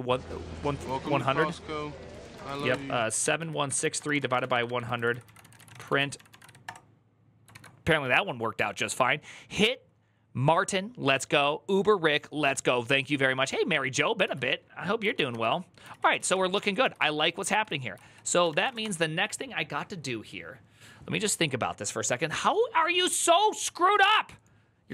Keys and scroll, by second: 0.8 ctrl+a, 1.7-6.2 typing, 6.4 Return, 14.1 alt+{, 14.8 ctrl+a, 15.1-16.5 typing, 16.6 ctrl+u, 17.8 ctrl+c, 18.0-18.8 typing.